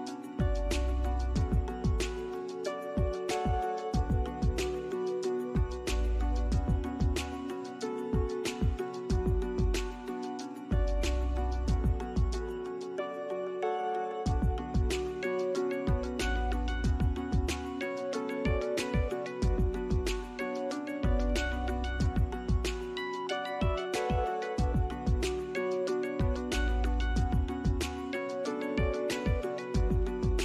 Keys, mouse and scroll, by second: 4.7 ctrl+click, 5.9 ctrl+click, 7.3 ctrl+scroll down 1, 10.1 alt+middle click, 11.6 alt+middle click, 12.3 alt+click, 15.4 alt+middle click, 18.2 scroll up 1, 18.7 middle click, 19.6 alt+click, 20.2 scroll up 1, 20.8 alt+middle click, 21.3 alt+click, 22.2 alt+middle click, 23.2 double click, 23.6 alt+click, 25.6 alt+middle click, 26.0 alt+click, 26.7 scroll up 1, 27.3 alt+click, 27.8 alt+middle click.